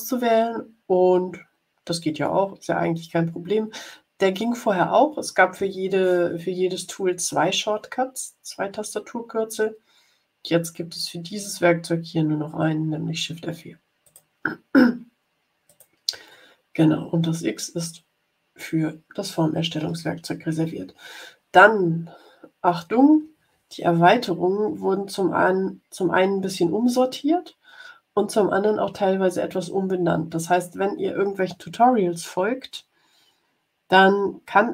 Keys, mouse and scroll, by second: 14.0 click, 15.6 click.